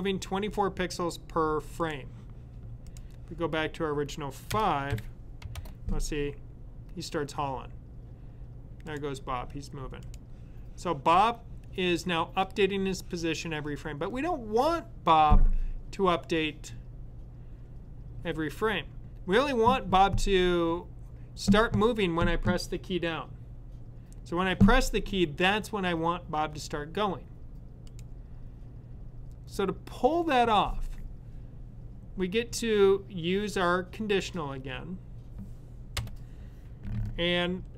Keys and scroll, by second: 4.8 5.